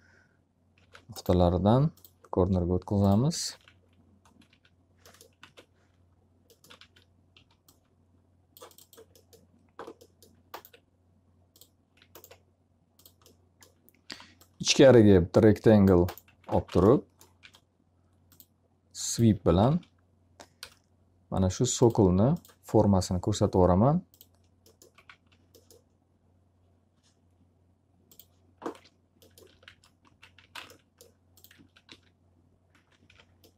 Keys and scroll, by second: 0.7 ctrl+a, 3.2-4.4 typing, 5.3 ctrl+z, 6.7 w, 7.3 s, 13.5 s, 16.2 x, 16.5 z, 16.7 alt+a, 17.3 s, 19.6 w, 20.5 Return, 24.5 f, 25.0 z, 28.9-31.8 typing, 33.0 F3.